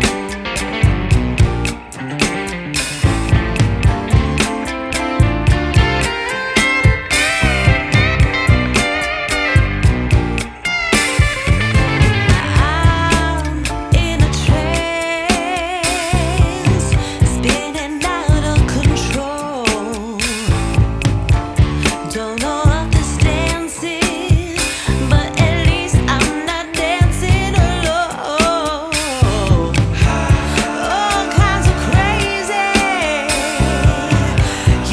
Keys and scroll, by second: 2.2 Return, 12.8 Return.